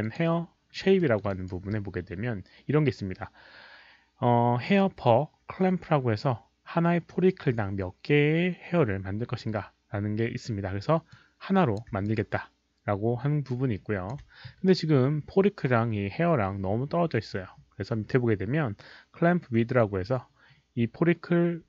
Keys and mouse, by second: 0.0 click, 0.9 alt+middle drag, 1.0 alt+click, 1.2 alt+right drag, 5.6 alt+right click, 5.6 alt+middle click, 5.6 click, 8.0 alt+right click, 8.0 alt+middle click, 8.0 click, 10.8 alt+right click, 10.8 alt+middle click, 11.1-11.7 drag, 12.0-14.0 alt+drag.